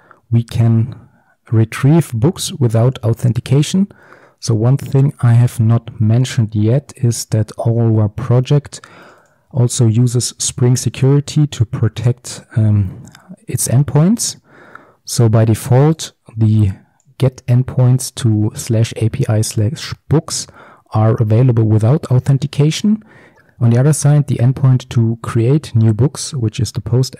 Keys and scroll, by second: 5.3 alt+1, 10.3 alt+1.